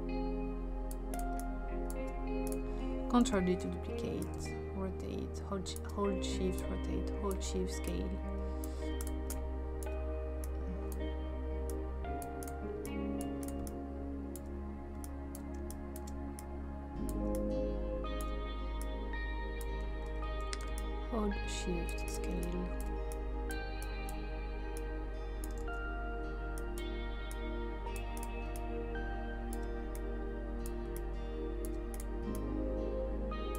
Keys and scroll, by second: 3.2 ctrl+d, 15.6 space, 25.6 ctrl+z.